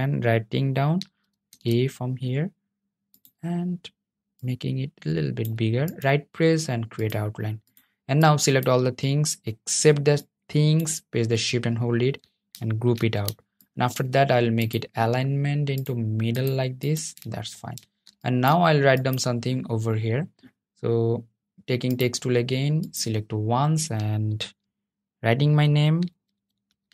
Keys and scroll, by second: 12.1 super+g, 23.2 t.